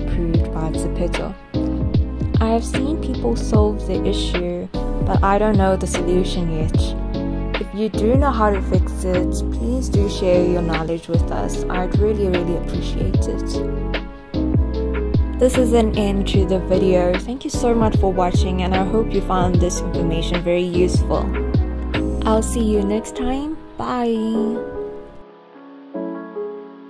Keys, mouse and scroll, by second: 2.6 click, 3.4 scroll up 1, 4.6 alt+middle click, 4.8-5.3 alt+scroll up 1, 5.7 click, 6.4 alt+click, 7.8 alt+scroll down 1, 8.0 alt+middle click, 8.5-11.5 alt+drag, 11.5-11.8 scroll down 1, 12.4 alt+middle click, 13.8-14.4 alt+scroll up 1, 15.3-17.6 drag, 17.6-18.1 scroll up 1, 18.2 alt+click, 19.3-19.7 alt+scroll down 1, 20.5 click, 22.8-23.4 scroll up 1, 23.5-26.8 alt+drag.